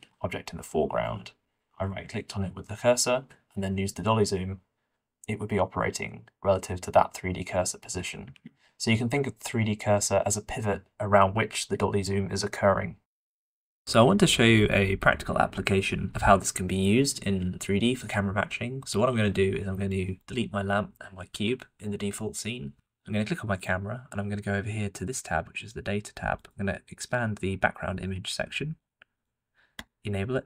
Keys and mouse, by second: 1.4 shift+click, 2.2 alt+a, 3.5 q, 9.5 shift+middle click, 20.0-22.7 drag, 22.7 Delete, 23.6-24.8 drag, 26.0 click, 29.1 click, 29.7 click.